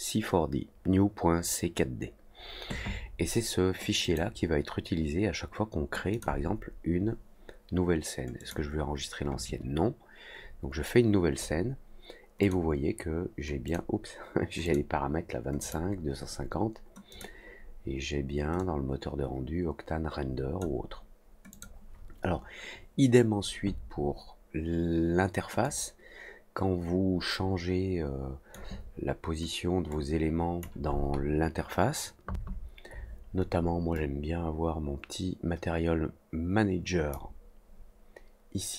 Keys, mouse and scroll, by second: 4.0 click, 6.1 click, 8.3 click, 12.4 click, 13.6 click, 14.6 click, 15.5 click, 17.0 click, 18.5-20.5 drag, 21.4 click, 25.6-28.5 drag, 29.8 click, 33.9-37.1 drag.